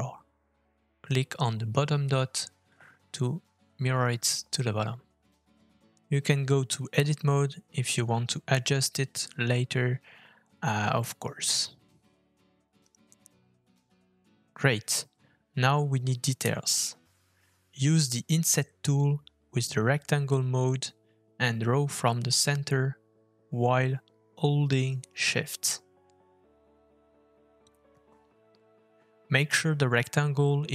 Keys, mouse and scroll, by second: 4.6 Tab, 6.0 middle click, 7.3 Tab, 9.4 click, 10.1 g, 12.1 click, 12.6 g, 13.4 Tab, 13.9 middle click, 16.4 middle click, 18.2 f, 21.5 middle click.